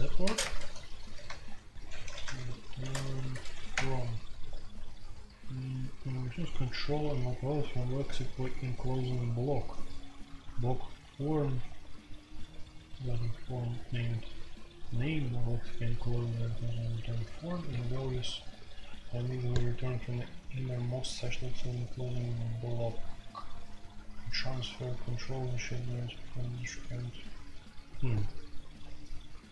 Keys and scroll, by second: 0.2-2.9 typing, 3.3 ctrl+n, 3.7 Return.